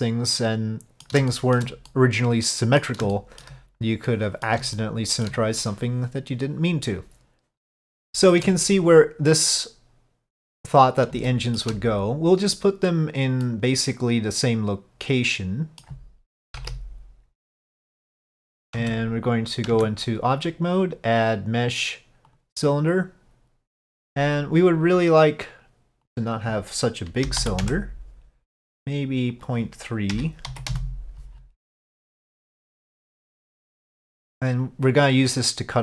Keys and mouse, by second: 1.4 shift+middle click, 2.0 middle click, 3.2 shift+middle click, 4.2 middle click, 4.9 shift+middle click, 8.1 shift+middle click, 11.3 shift+middle click, 13.5-15.9 middle drag, 16.6 KP_5, 16.7 KP_1, 18.9 Tab, 20.9-22.5 drag, 26.1-28.6 drag, 29.4-31.6 drag, 33.2 click, 34.7-35.8 drag.